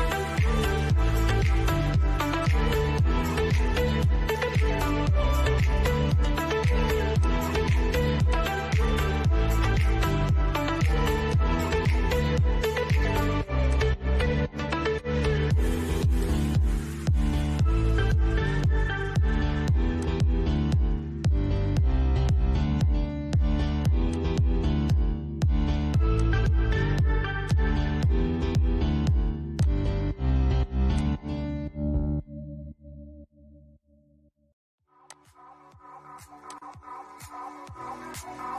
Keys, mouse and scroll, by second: 4.5 scroll down 1, 5.2 shift+middle click, 6.4-9.5 drag, 9.5 ctrl+z, 10.5 click, 11.3-12.9 shift+middle drag, 12.9 click, 13.0-14.5 drag, 14.5 ctrl+z, 15.4 click, 19.2 click, 20.8 Return, 23.4-30.2 drag, 31.1-34.3 middle drag, 34.3-38.0 drag.